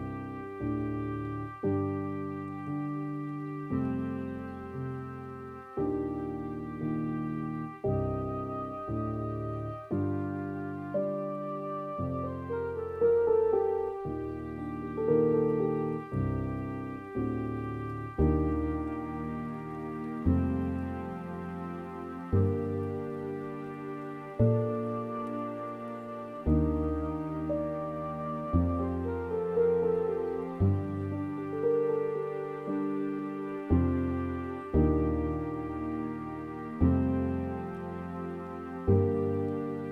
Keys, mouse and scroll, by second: 13.0-13.8 scroll up 7, 13.8 middle click, 14.3-15.3 scroll down 2, 15.3-16.8 scroll down 1, 16.8-17.7 scroll down 1, 17.7-18.4 scroll down 1, 18.4-19.7 drag, 19.7 scroll up 4, 19.9-20.9 middle drag, 20.9-21.2 scroll down 4, 21.2 middle click, 22.2-22.9 scroll up 6, 22.6 middle click, 22.9-23.5 scroll down 7, 23.5 middle click, 24.1 scroll up 1, 24.2-24.6 scroll down 3, 24.6-32.5 middle drag, 32.5-36.9 drag, 36.9 scroll up 4, 37.1 middle click, 37.9-39.0 scroll down 3, 39.8-39.9 scroll down 4.